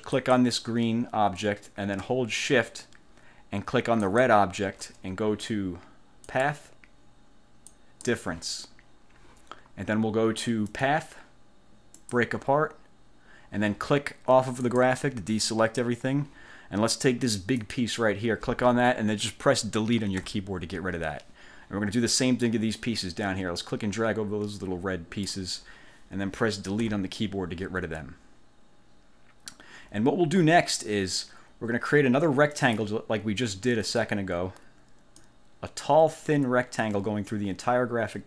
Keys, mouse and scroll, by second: 0.3 click, 4.2 shift+click, 6.4 click, 7.8 click, 10.8 click, 12.1 click, 14.8 click, 17.7 click, 20.3 Delete, 22.5-25.6 drag, 27.0 Delete, 32.7 click, 35.3-38.2 drag.